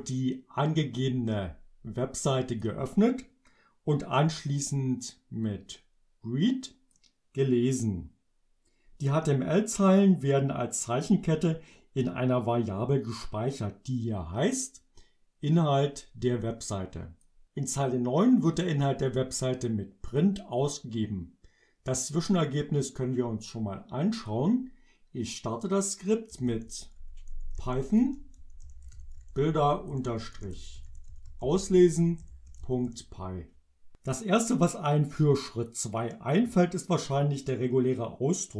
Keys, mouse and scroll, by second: 0.2-2.8 drag, 5.5-7.1 drag, 15.5-17.5 drag, 18.7-20.4 drag, 20.7 click, 24.3 click, 26.3-33.2 typing.